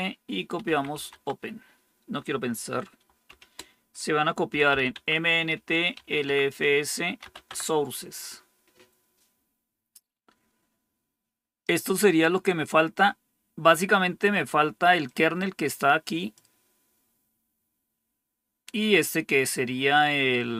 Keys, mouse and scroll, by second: 0.6-1.2 typing, 3.2 typing, 4.4-5.9 typing, 6.9-7.6 typing, 15.0-16.3 drag.